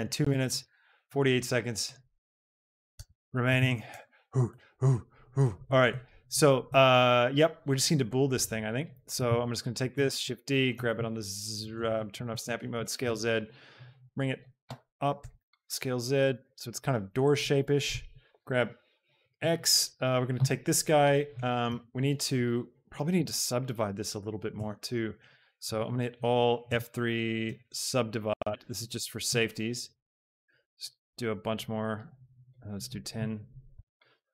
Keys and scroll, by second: 0.8 shift+Tab, 3.4 Tab, 9.3 shift+Tab, 10.0 shift+d, 10.4 Escape, 10.7 z, 12.5 shift+Tab, 15.1 s, 15.5 z, 16.2 g, 18.4 x, 21.7 Tab, 23.2 ctrl+r, 24.7 Escape, 25.8 a, 26.9 F3, 27.6 u, 28.0 b, 28.4 Return, 33.9 Tab.